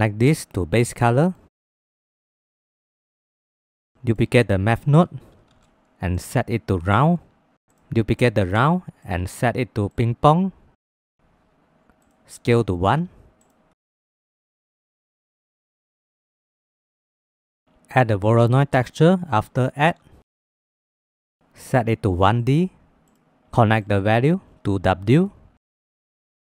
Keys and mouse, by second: 0.0-0.9 drag, 1.8 middle click, 2.2 middle click, 2.5-2.8 drag, 3.6 click, 3.7 click, 4.6 shift+d, 6.5-7.0 drag, 7.7 click, 8.4 shift+d, 9.0 click, 9.9-11.2 drag, 12.0-13.4 drag, 14.3 middle click, 14.8 click, 15.3 click, 16.0 middle click, 16.3 click, 17.0 middle click, 17.3 middle click, 17.7 shift+a, 22.5-23.2 middle drag, 24.0-25.2 middle drag, 26.2 middle click.